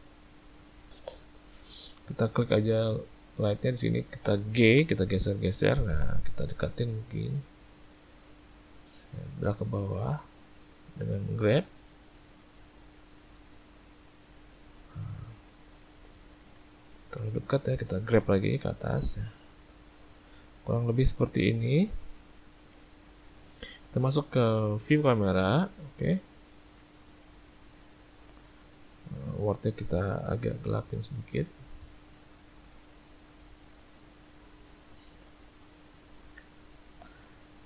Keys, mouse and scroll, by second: 2.9 click, 3.8 click, 4.7 g, 12.9 middle click, 16.8 shift+middle click, 18.1 g, 22.5 shift+middle click, 22.9 ctrl+middle click, 23.6 `, 26.0 `, 27.8 shift+middle click, 29.1 click, 29.9 click, 34.6 shift+middle click, 35.6 ctrl+middle click.